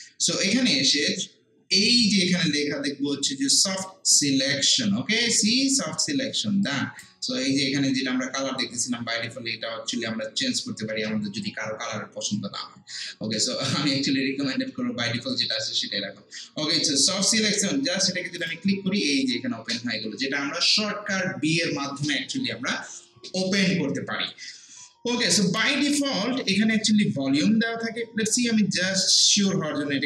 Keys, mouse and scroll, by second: 9.3-11.2 scroll down 1, 18.4 click, 29.4 click.